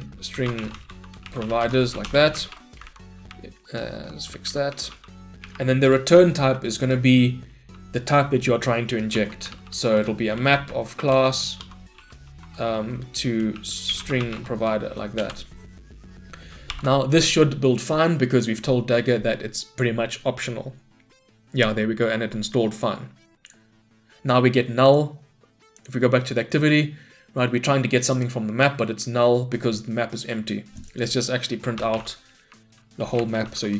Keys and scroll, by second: 11.2 Return, 16.7 Return, 16.8 shift+F10, 33.1 Return.